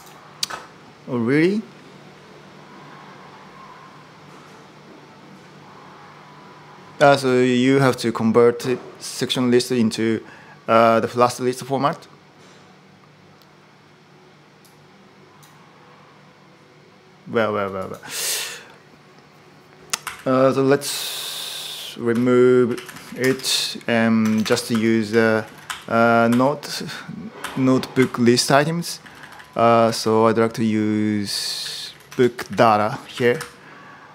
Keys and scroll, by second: 17.3 super+h, 19.8-20.4 typing, 21.9-23.3 typing, 24.1 Escape, 24.3 ctrl+u, 24.5 ctrl+u, 25.2 s, 25.5 ctrl+u, 26.1 ctrl+u, 27.2 ctrl+u, 28.5-34.1 typing.